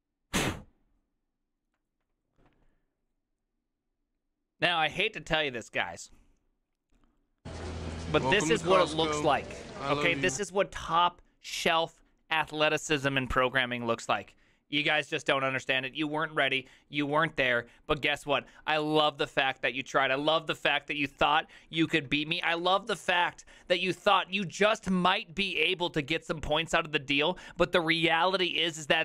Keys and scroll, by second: 22.1 alt++.